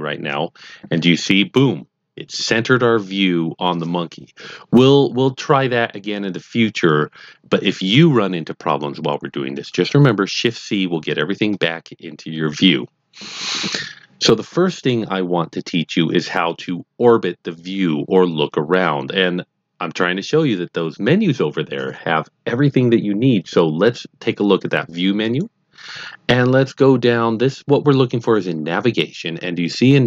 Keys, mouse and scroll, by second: 25.2 click.